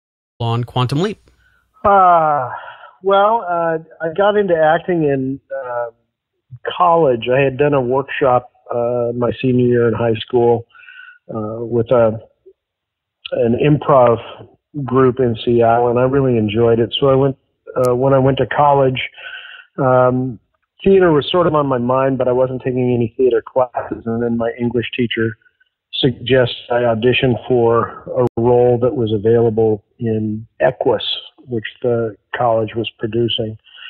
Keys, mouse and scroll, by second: 0.2 click, 0.3 space, 2.5-3.7 drag, 3.8 click, 4.7 ctrl+s, 7.0 click, 7.9 click, 10.4 click, 17.8 scroll down 1, 18.3-18.8 scroll down 1, 18.8-19.4 scroll up 3, 19.8 scroll up 1, 21.4 click, 22.5 click, 28.1 click, 30.2-33.8 drag.